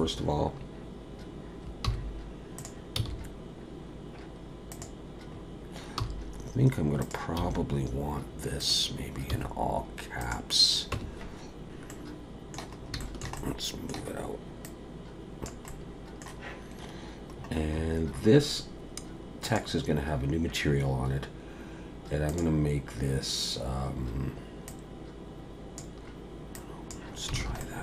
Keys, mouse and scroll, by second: 1.8 g, 3.0 s, 5.3-6.0 scroll up 5, 6.0 g, 7.4 s, 9.3 g, 10.9 Tab.